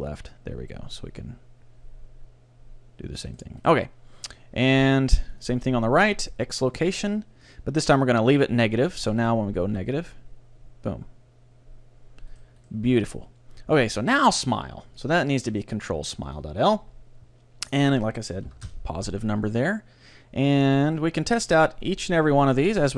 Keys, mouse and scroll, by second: 3.5-5.5 right drag, 5.3-7.9 drag, 9.1-10.8 right drag, 9.5 g, 12.5-14.5 right drag, 13.9-16.9 drag, 17.7-19.5 drag, 20.9-22.5 right drag, 21.3 g.